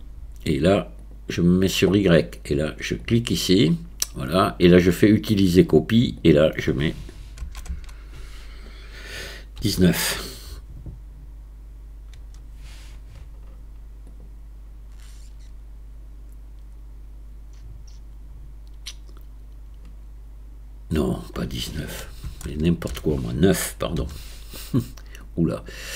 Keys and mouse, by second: 1.0 click, 3.0 click, 5.2 click, 6.2-15.5 drag, 7.7 BackSpace, 20.9-25.7 drag.